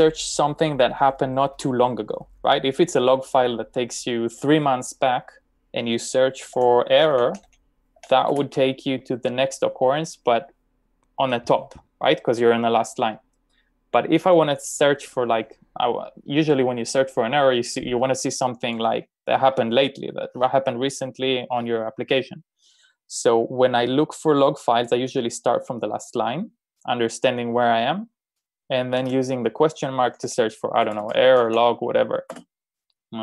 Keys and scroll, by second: 6.6-8.5 typing, 29.1 BackSpace, 32.4-33.1 typing.